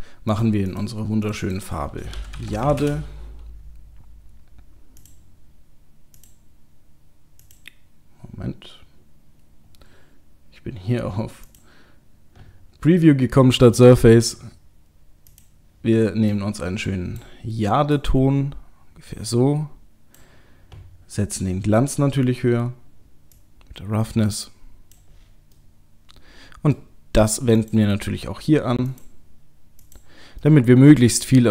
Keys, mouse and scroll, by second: 5.0 click, 6.2 click, 11.5 click, 15.3 click, 21.0-21.8 scroll down 1, 21.8-22.2 scroll down 7, 23.4 click, 23.4-25.2 scroll down 1, 25.6 middle click, 27.6 click, 28.9 click, 30.3 middle click.